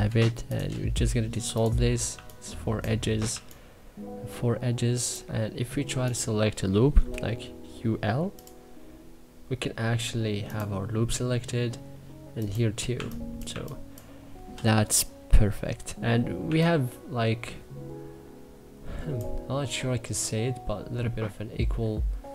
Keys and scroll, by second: 1.8 2, 3.0 1, 12.6 2, 13.1 1, 14.2 e, 16.1 1, 22.1 w.